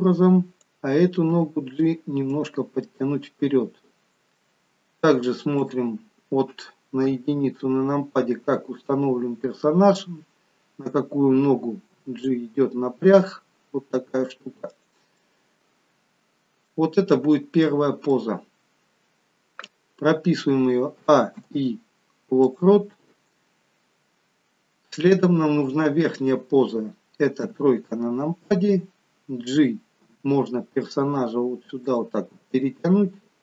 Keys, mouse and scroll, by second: 0.6 click, 1.4 g, 2.9 middle click, 5.6 click, 7.4 KP_1, 12.0 g, 15.2 middle click, 17.2-17.6 scroll down 1, 17.6 middle click, 20.9 a, 21.4 i, 27.4 KP_3, 30.1 g.